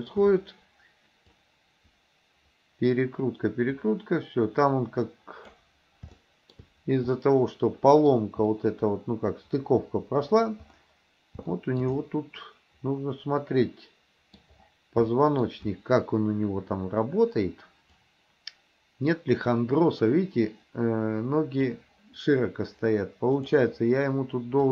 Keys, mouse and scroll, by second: 1.5-5.6 drag, 6.2-6.6 shift+middle drag, 7.2-8.2 middle drag, 8.5-10.5 middle drag, 11.6-11.9 shift+middle drag, 12.1-14.4 middle drag, 15.2 shift+middle click, 18.1-21.8 drag, 23.5 click.